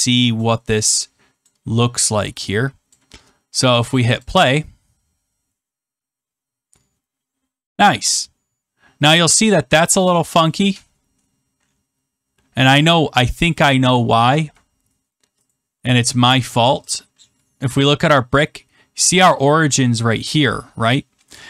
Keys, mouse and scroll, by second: 1.4 click, 2.9-3.9 drag, 3.6 right click, 4.1-5.2 drag, 15.5-16.5 drag, 17.5-18.0 scroll.